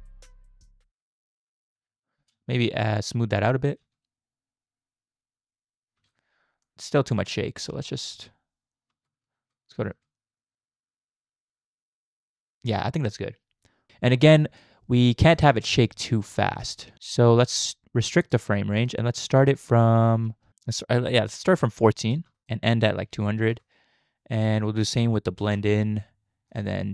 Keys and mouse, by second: 2.2 space, 2.7-3.7 shift+drag, 6.1 space, 6.7-8.0 shift+drag, 8.2 space, 8.9 space, 9.2 z, 9.9 space, 14.6 click, 15.5 space, 16.4 space, 16.6-18.4 drag, 18.8 click, 20.4 space, 21.4 click, 21.4 space, 22.5-23.5 drag, 24.4-25.4 drag, 26.6 click.